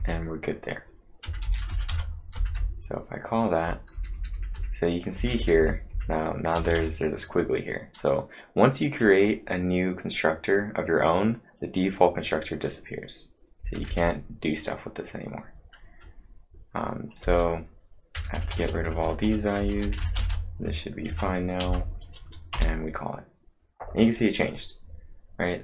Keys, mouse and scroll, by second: 0.0-0.2 typing, 1.2-6.9 typing, 13.6-13.9 typing, 15.6-15.9 typing, 17.2-18.5 typing, 20.0 space, 20.1 f, 21.1 ctrl+`, 21.6 Up, 22.5 Return.